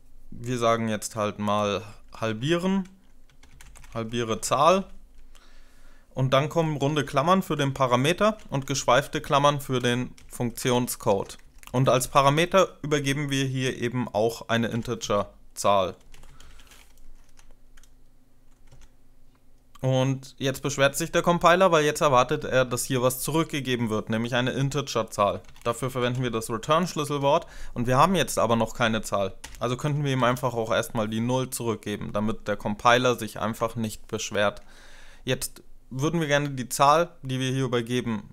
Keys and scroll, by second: 1.3-5.1 typing, 6.5-7.3 typing, 8.1 ctrl+alt+7, 8.1 ctrl+alt+0, 8.9 Left, 9.3-10.0 typing, 10.0 Return, 10.4 Up, 10.5 Up, 11.1 End, 11.4 Left, 11.9 Left, 14.3-17.1 typing, 17.1 Down, 18.5 Tab, 22.5 Return, 25.1-27.1 typing, 29.3 0, 30.1 ;, 33.3 Up.